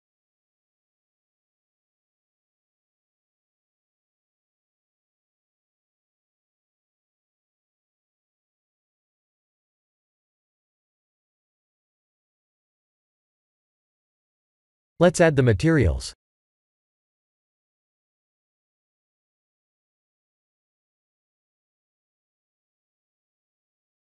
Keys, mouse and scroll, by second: 0.1 middle click, 0.8 KP_3, 1.0 KP_3, 1.8 s, 3.0 g, 4.5 middle click, 5.7 click, 6.7 middle click, 8.7 click, 9.1 middle click, 10.8 s, 11.1 Tab, 11.6 middle click, 15.0 click, 15.5 click, 15.9 middle click, 16.6 middle click, 17.5 click, 17.9 middle click, 18.4 Tab, 18.9 click, 19.3 middle click, 20.9 click, 21.4 click, 22.9 click.